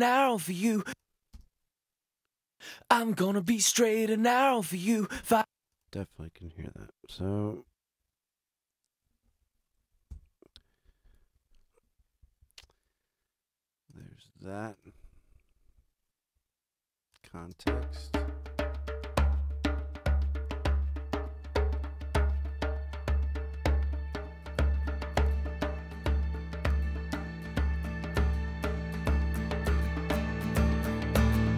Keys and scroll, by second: 0.6 space, 5.1 space, 7.6 super+-, 10.1 ctrl+alt+super+Up, 11.3 ctrl+alt+super+a, 17.3 space.